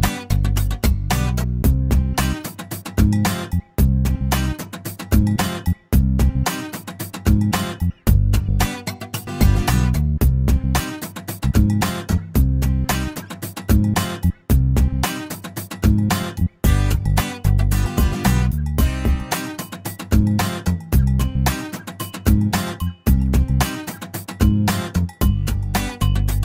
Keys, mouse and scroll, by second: 0.1 click, 1.8 click, 3.5 e, 5.0-5.3 scroll down 2, 5.3-8.6 middle drag, 9.6 scroll down 2, 9.7 middle click, 10.3 scroll down 1, 10.4 middle click, 11.1 scroll up 1, 11.3 middle click, 11.9-12.7 scroll up 1, 12.7 l, 16.4 click, 19.1 click, 19.9 right click, 20.7-21.1 scroll up 1, 23.5 click, 24.2 click, 25.8 click.